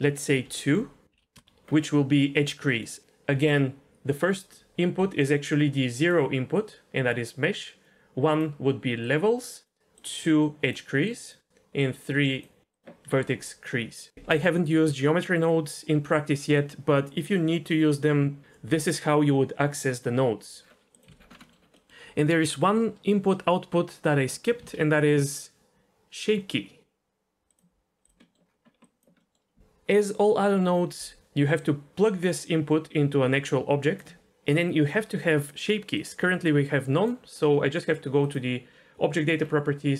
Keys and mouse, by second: 3.0 ctrl+z, 3.0 d, 4.2 d, 5.0-13.0 d, 5.3 click, 6.6 click, 7.9-8.4 drag, 9.0 click, 9.9 click, 11.0 drag, 11.8-12.4 drag, 12.7 click, 14.1 d, 20.9 click, 21.0 Delete, 21.4 middle click, 21.8 middle click, 24.6 shift+a, 28.2 middle click, 28.9 click, 29.3 middle click, 31.2-34.0 drag, 35.5 click.